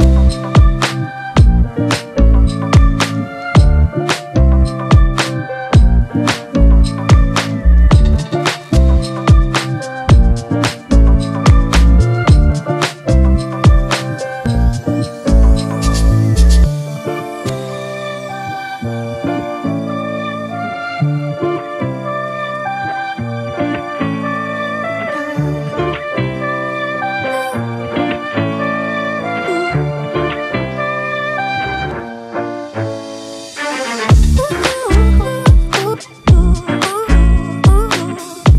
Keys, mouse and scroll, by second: 1.9 Left, 2.3 Left, 2.6 Up, 2.7 Up, 5.4 ctrl+=, 5.6 ctrl+=, 5.8 ctrl+=, 6.4 scroll down 1, 7.6 Return, 8.0 Down, 8.4 Up, 8.6 Up, 8.8 Right, 9.2 Up, 9.5 Up, 9.7 Up, 17.4 ctrl+-, 20.1 double click, 22.7 typing, 26.6 typing, 28.2-29.1 typing, 28.4 ctrl+=.